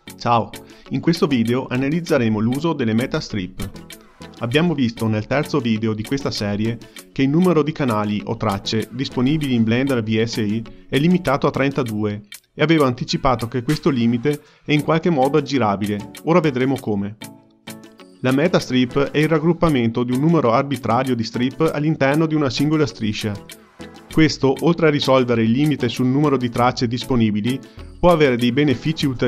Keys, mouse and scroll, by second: 0.2 shift+a, 0.6 click, 0.8 shift+d, 1.5 shift+d, 2.1 shift+click, 2.2 shift+click, 2.3 shift+d, 2.9 middle click, 3.4 shift+click, 3.6 middle click, 3.8 shift+d, 4.2 scroll down 2, 4.4 ctrl+middle click, 4.8 click, 5.2 shift+d, 5.6 middle click, 5.9 scroll up 5, 6.0-7.2 ctrl+middle drag, 7.2 click, 7.3 shift+d, 7.8-10.8 middle drag, 11.6 click, 14.1 shift+d, 18.6 click, 20.8 click, 23.0 ctrl+g, 23.6-25.6 drag, 27.6 click.